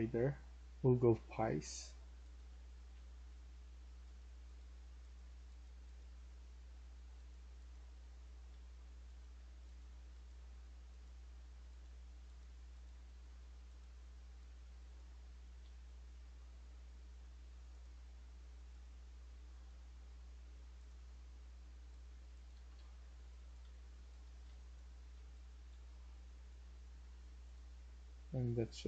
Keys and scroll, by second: 0.0-0.2 typing, 2.2-3.7 typing, 5.6-8.4 typing, 12.9 Escape, 15.3-16.0 typing, 22.4 Escape, 22.6 Escape, 23.1-26.1 typing, 28.7-28.8 typing.